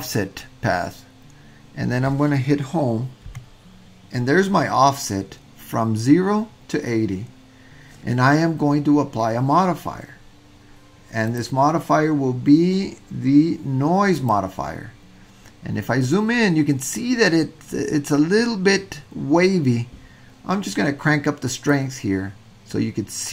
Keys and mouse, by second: 3.3 Home, 11.3-14.4 drag, 21.7-23.2 drag.